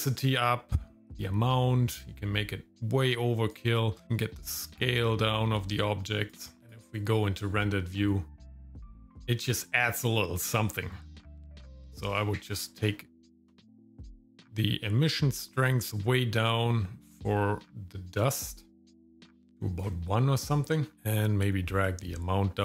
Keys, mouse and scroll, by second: 1.0-3.5 drag, 4.0-6.4 shift+drag, 6.6 KP_0, 7.0 click, 9.1 ctrl+click, 10.6 click, 14.8-19.9 drag, 21.8-22.6 shift+drag.